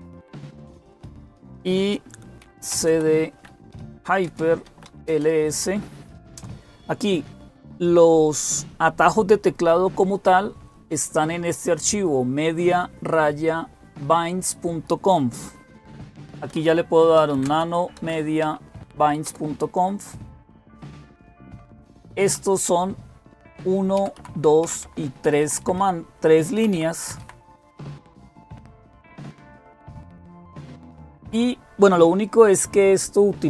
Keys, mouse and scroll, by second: 2.0-5.2 typing, 16.1-18.4 typing, 19.1 Return, 21.9 Down, 22.1 Down, 22.3 Down, 23.8 Down, 24.0 Down, 24.6 Down, 25.1 Up, 25.2 Up, 25.4 Up, 25.6 Up, 26.4 Down, 26.5 Down, 26.8 Up, 27.0 Up, 27.6-29.2 Right, 29.3-30.6 Right, 30.0 Down, 30.0 Up, 33.2 Right, 33.2 Left, 33.4 Left.